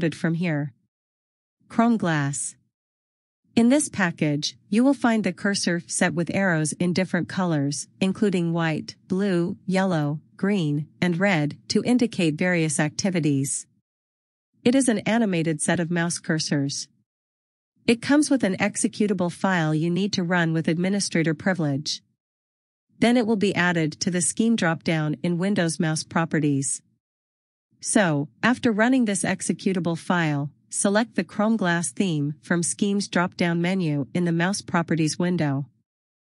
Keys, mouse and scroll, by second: 3.3 click.